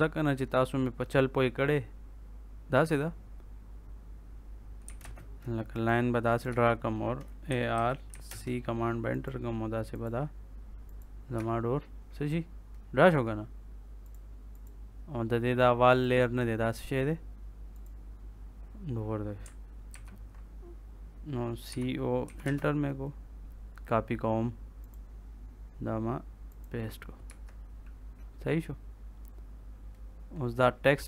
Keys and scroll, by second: 4.8 l, 4.9 space, 6.4 Escape, 7.2-8.5 typing, 11.3 Escape, 19.8 ctrl+c, 21.6 c, 22.2 o, 22.4 space, 27.2 Escape.